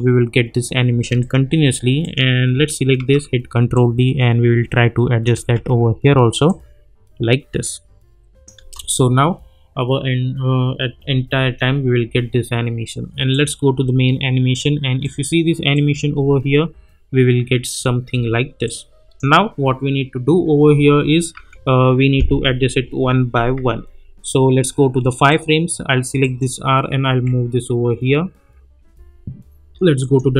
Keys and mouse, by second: 0.9 space, 1.2 click, 2.9 ctrl+d, 3.7-5.3 drag, 5.5 ctrl+d, 6.4-8.6 drag, 8.6 space, 11.0 space, 13.3 click, 16.0 space, 18.3 space, 18.6-19.2 drag, 21.3 =, 23.5 =, 25.3 click, 27.1 -, 28.7 [, 30.0 click.